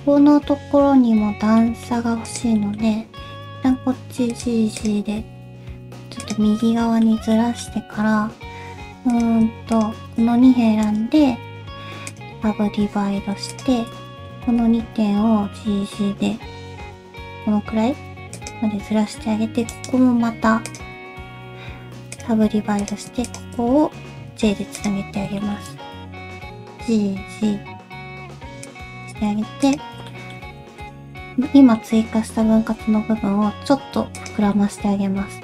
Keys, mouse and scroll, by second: 1.6 middle click, 2.3 click, 2.6 middle click, 3.1 g, 4.8 click, 5.1 g, 6.6 middle click, 7.3 middle click, 8.8 2, 9.1 click, 9.7 shift+click, 10.8 right click, 12.7 1, 13.5 alt+click, 14.0 ctrl+z, 14.0 shift+click, 14.0 g, 23.1 click, 23.3 shift+click, 24.3 j, 24.8 click, 25.4 shift+middle click, 25.9 g, 29.6 alt+click, 30.1 middle click, 30.8 shift+click, 31.3 scroll up 1, 31.5 middle click, 32.5 alt+s, 34.5 middle click.